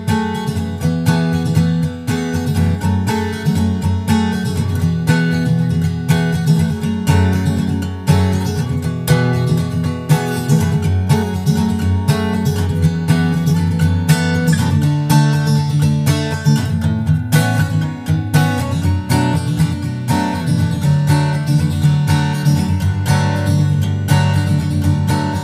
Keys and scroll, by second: 1.0 super+Right, 3.7 super+Right, 9.6 super+Right, 18.7 super+Right, 23.2 super+Right.